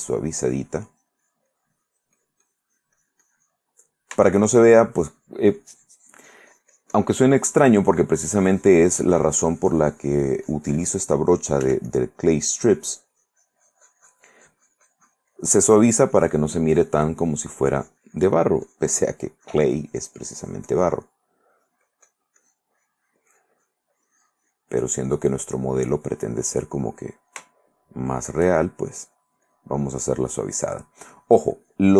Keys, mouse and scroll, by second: 0.0 click, 0.6-4.1 drag, 4.3 shift+middle click, 4.9-11.4 shift+drag, 11.8 f, 12.1 click, 12.4-21.3 drag, 22.6-24.0 drag, 24.1 click, 26.0-27.5 drag, 27.7 shift+middle click, 28.3 shift+middle click, 29.3-31.9 shift+drag.